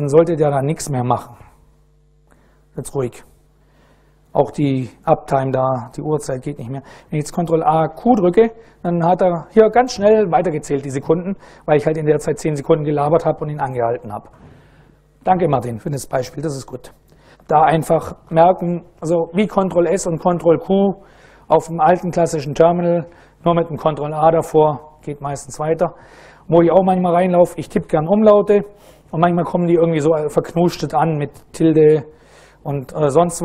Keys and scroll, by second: 7.3 ctrl+a, 7.8 q.